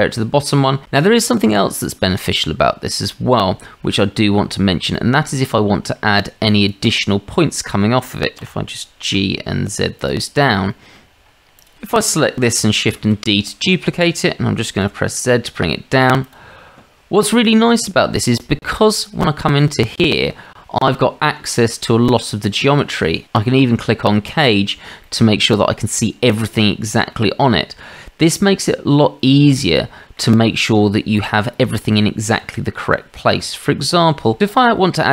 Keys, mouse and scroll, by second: 0.2-0.6 drag, 1.9 click, 4.9-5.2 shift+drag, 6.1-6.7 drag, 7.4-7.7 shift+middle drag, 8.4 g, 10.7 shift+drag, 11.6 click, 11.7 Delete, 12.9 shift+d, 17.2 shift+middle drag, 18.5 shift+middle drag, 21.0 Tab, 22.0-22.7 drag, 24.3 click, 25.1-27.1 drag, 29.7 middle click, 31.1 middle click, 32.5-32.9 shift+middle drag, 33.4 Tab.